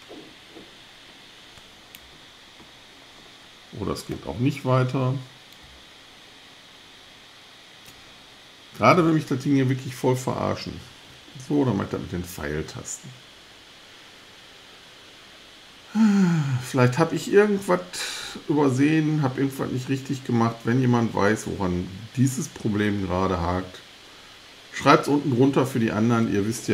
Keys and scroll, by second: 9.5 Left, 11.1 Right.